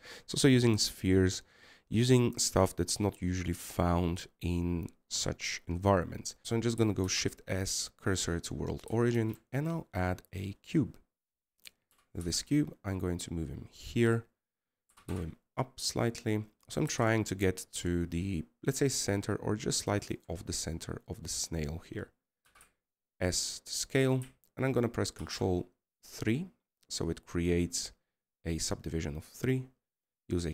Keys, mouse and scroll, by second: 10.3-10.9 scroll down 3, 12.6-13.7 scroll up 3.